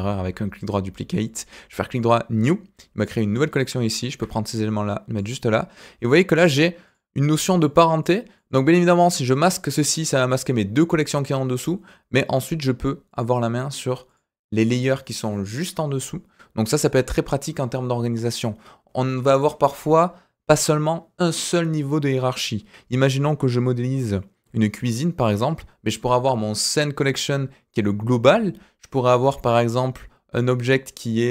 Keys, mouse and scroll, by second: 1.1 click, 1.4 right click, 3.0 click, 3.5 click, 4.0 shift+click, 4.5 click, 6.3 click, 6.8 click, 8.0 click, 8.3 click, 9.5 click, 10.8 click, 11.6 click, 12.2 click, 13.1 click, 14.0 click, 14.6 click, 16.8 click, 26.9 click, 27.0 click, 29.4 click.